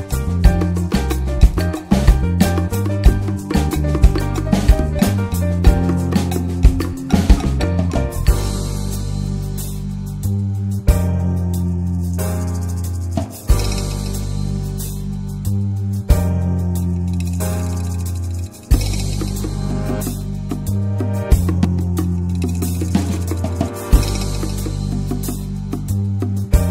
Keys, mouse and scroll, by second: 0.3-1.5 scroll up 1, 1.5-1.8 drag, 1.8-3.1 middle drag, 3.1 click, 4.0-5.1 scroll down 3, 5.1-5.7 scroll down 1, 5.7-6.3 scroll down 1, 6.3-7.8 scroll down 1, 7.8-8.5 scroll down 1, 8.5 click, 9.3 scroll down 1, 9.5-15.8 middle drag, 15.8-16.9 ctrl+shift+drag, 16.9-17.3 scroll up 2, 17.3-17.7 middle drag, 17.7-20.6 drag, 20.6 scroll down 2, 20.9-21.2 scroll up 1, 21.2-22.5 middle drag, 22.5-25.7 drag, 25.7-26.0 scroll up 3, 26.0 scroll down 2, 26.2 middle click, 26.3-26.6 scroll up 1, 26.6 scroll down 1.